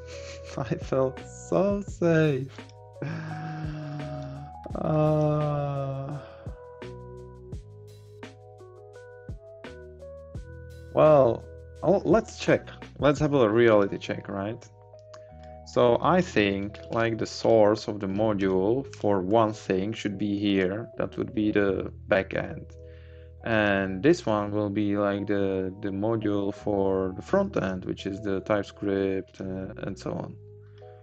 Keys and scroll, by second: 16.5 Up, 16.8 Left, 18.1 Up, 18.4 Left.